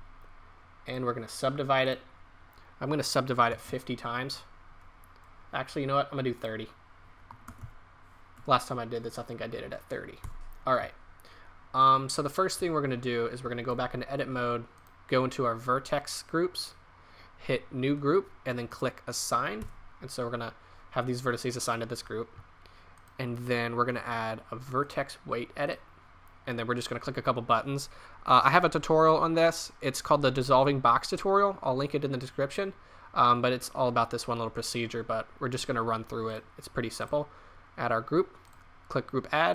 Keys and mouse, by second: 6.4-8.3 drag, 10.2 Tab, 11.8 middle click, 12.6 Tab, 13.4 Tab, 13.7 Tab, 19.6 Tab, 24.3-26.3 drag, 36.2-38.3 drag, 38.4-39.5 drag.